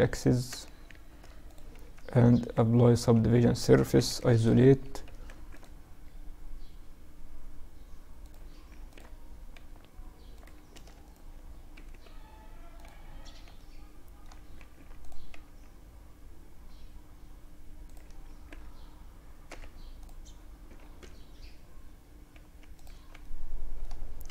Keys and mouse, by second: 1.8 ctrl+alt+shift+2, 3.3 KP_Divide, 3.9 Tab, 4.6 ctrl+r, 8.0 ctrl+r, 10.0 a, 10.3-13.0 right drag, 11.0 g, 13.0 middle click, 13.8 ctrl+r, 17.1-18.6 drag, 17.5 ctrl+r, 22.2 Tab, 23.6-24.3 middle drag, 23.6 t.